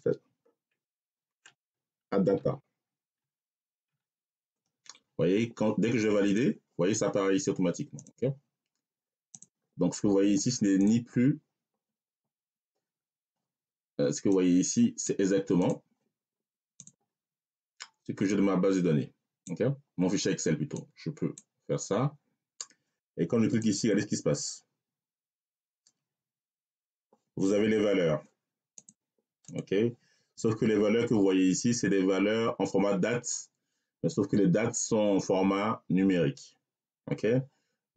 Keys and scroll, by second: 0.8 Caps_Lock, 1.1-3.7 typing.